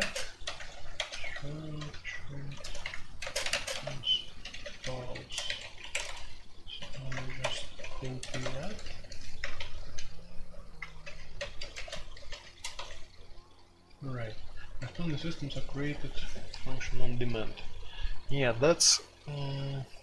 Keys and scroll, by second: 0.0-1.7 typing, 2.6 ctrl+n, 2.8 Return, 3.1-12.7 typing, 14.0-15.1 typing.